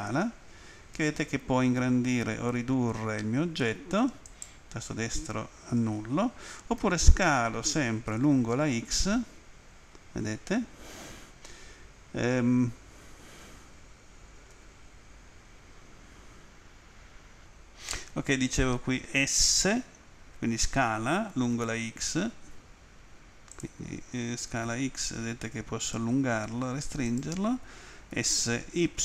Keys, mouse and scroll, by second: 4.2 right click, 8.2 x, 14.5 Escape, 23.5 click, 24.1-25.1 typing, 27.0 right click, 28.1 s, 28.8 y.